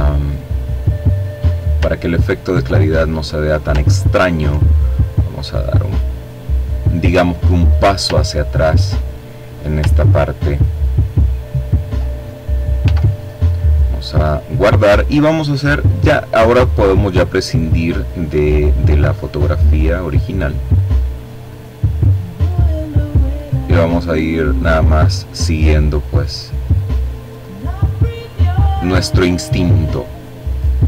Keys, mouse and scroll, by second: 0.0-1.1 scroll down 3, 2.3-2.8 ctrl+scroll up 1, 3.8-6.0 drag, 6.7-7.2 ctrl+scroll down 2, 8.3-9.5 ctrl+drag, 9.5-10.0 scroll up 2, 10.2-10.7 scroll down 2, 11.3 s, 14.3 click, 17.2 click, 19.0 click, 19.8 click, 20.8 click, 21.7 click, 22.9 click, 23.7 click, 24.4-25.6 drag, 25.7 click, 27.1 click, 28.9 click, 30.1-30.8 drag.